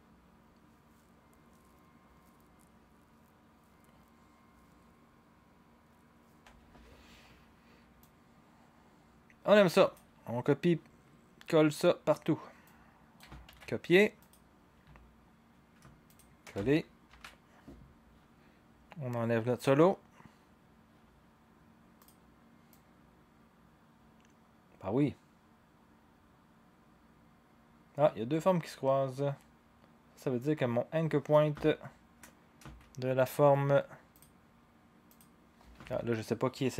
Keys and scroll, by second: 6.4 0, 13.5 ctrl+c, 17.1 ctrl+v.